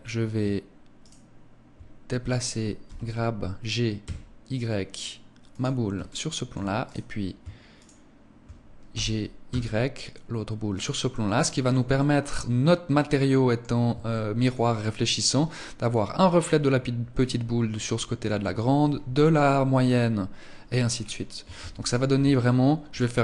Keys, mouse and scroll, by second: 1.0 shift+right click, 5.3 click, 5.8 shift+middle click, 6.7 right click, 7.7 shift+right click, 8.7 g, 10.6 click, 10.9 middle click, 11.7 shift+middle click, 12.4 middle click, 13.9 shift+middle click, 20.6 scroll down 7, 21.3 ctrl+s.